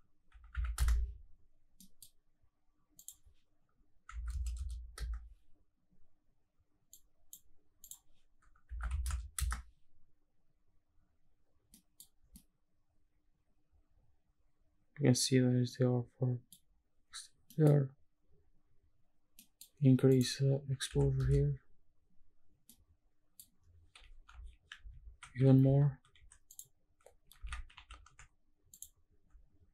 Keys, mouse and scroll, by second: 1.8 middle click, 3.0-5.0 drag, 4.5 KP_0, 6.9 click, 7.8-9.4 drag, 11.7 middle drag, 11.7 scroll down 2, 12.3-16.5 middle drag, 12.3 scroll down 1, 16.6 scroll up 2, 18.2 middle click, 18.2-19.4 scroll down 1, 19.4 middle click, 20.1-21.2 drag, 22.3-22.7 scroll up 2, 22.7 middle click, 23.5-23.8 scroll up 2, 27.4 shift+`.